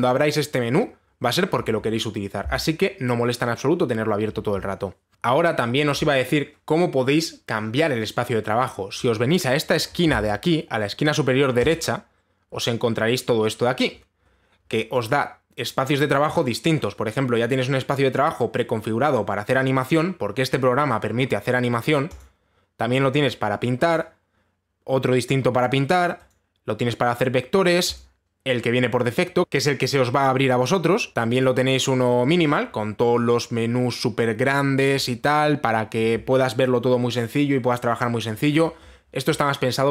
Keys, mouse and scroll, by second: 12.3 click, 14.5-15.3 scroll, 15.3 middle click, 15.7 click, 22.8 click, 24.5 click, 26.9 click, 28.6 click, 29.4-30.5 scroll, 32.0 click.